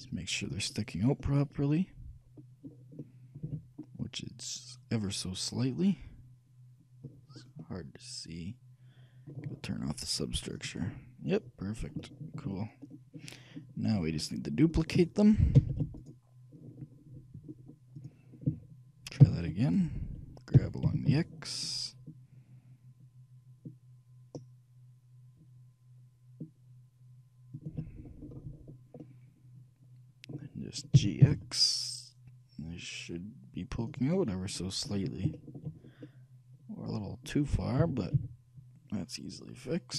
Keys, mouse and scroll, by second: 1.1-2.9 middle drag, 3.1-5.8 middle drag, 3.6 a, 7.5 middle click, 7.8-9.6 middle drag, 10.7-11.7 drag, 11.7-14.4 middle drag, 15.7 shift+d, 16.2-18.0 right drag, 18.1-19.8 drag, 19.3 shift+d, 20.7 g, 28.1-31.0 middle drag, 31.1 g, 34.3-36.7 middle drag, 37.9 shift+g.